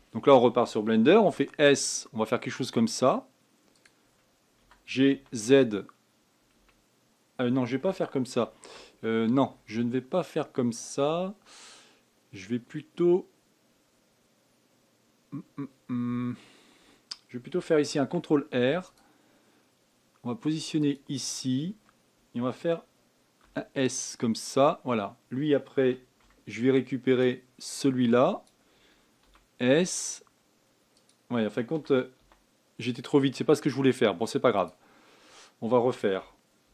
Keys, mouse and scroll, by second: 1.9 s, 5.3 g, 9.0 ctrl+z, 18.6 ctrl+r, 24.1 s, 26.4 a, 26.8 b, 29.9 s, 32.4 g.